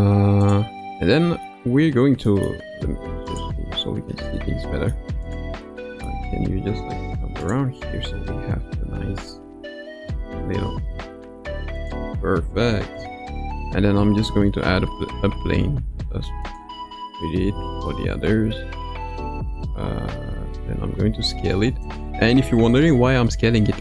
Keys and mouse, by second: 0.4 click, 0.8-1.4 middle drag, 2.2 middle click, 3.4-4.0 drag, 4.4-4.9 middle drag, 5.3-5.6 drag, 5.6 middle click, 6.8 g, 7.9 KP_0, 10.0 g, 13.9 shift+a, 17.4 Tab, 18.2 a, 20.2 s, 23.0 Tab.